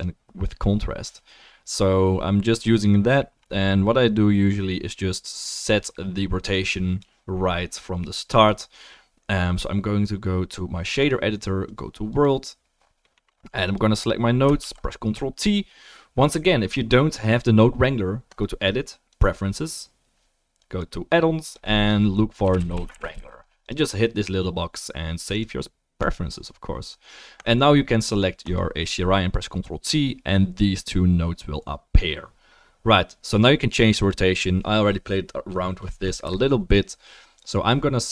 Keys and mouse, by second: 0.0 middle click, 0.3-6.6 drag, 6.6-13.1 middle drag, 13.7-15.4 drag, 14.6 ctrl+t, 15.4-19.3 middle drag, 15.4-19.3 right drag, 18.4-19.3 drag, 19.5-20.6 drag, 19.5-20.6 middle drag, 19.5-20.6 right drag, 28.7-34.1 drag.